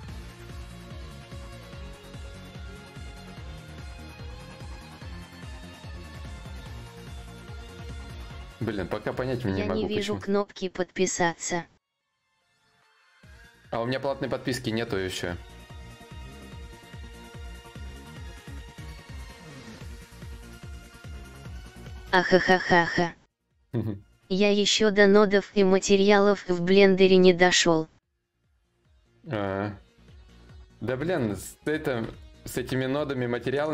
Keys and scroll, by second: 30.6 alt+Tab, 31.6 alt+Tab, 32.0 alt+Tab.